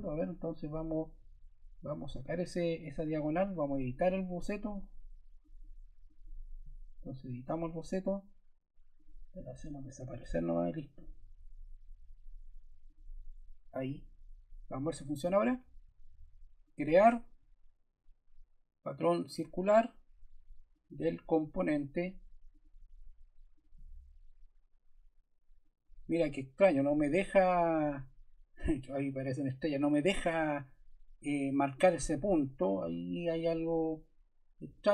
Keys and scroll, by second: 9.6 BackSpace.